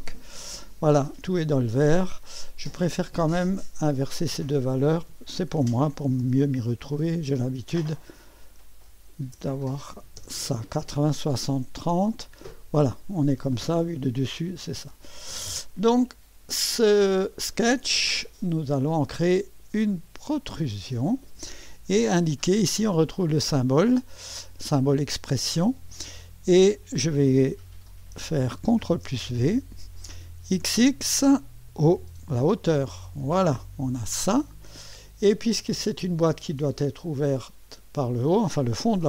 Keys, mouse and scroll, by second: 0.0 click, 2.5 click, 4.1 click, 5.3-6.9 typing, 7.9 click, 8.9-9.9 typing, 10.1 Return, 12.1 click, 12.1 typing, 13.7-15.7 typing, 15.2 click, 16.1-16.7 scroll up 1, 16.7-18.6 middle drag, 20.3 click, 25.2 click, 28.9 ctrl+v, 30.4 typing, 31.8 click, 32.7 click, 34.2 click, 35.5 click.